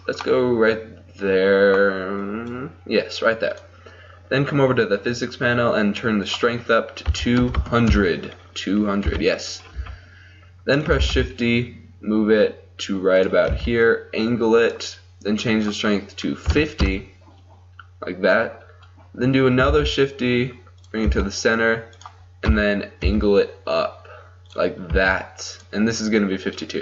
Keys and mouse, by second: 0.4 middle click, 0.6-2.3 middle drag, 2.3-6.3 drag, 6.3-7.6 middle drag, 7.6 click, 7.6 KP_0, 9.1 KP_7, 9.9 z, 11.2 shift+d, 13.6 r, 15.7-16.9 drag, 19.7 shift+d, 21.1 r, 22.5 KP_3, 23.2 r, 25.0 g.